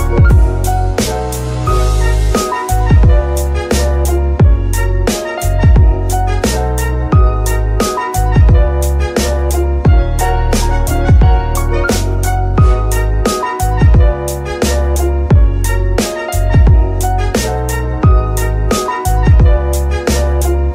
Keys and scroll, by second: 0.0-2.0 typing, 9.7 n.